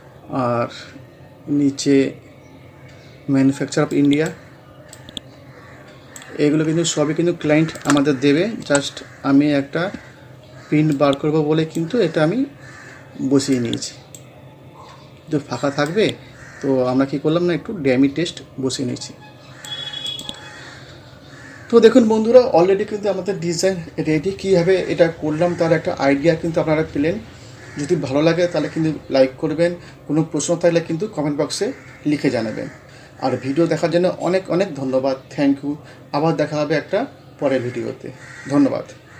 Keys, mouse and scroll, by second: 0.4 scroll up 1, 1.4 scroll down 1, 2.9 scroll up 1, 4.0-6.6 drag, 6.6 scroll up 1, 7.5-7.8 shift+scroll up 1, 7.8 shift+click, 8.7 c, 9.2 scroll down 1, 11.0-14.5 drag, 14.5 scroll up 1, 15.9-20.1 drag, 20.5 scroll down 1, 21.5-23.3 scroll up 1.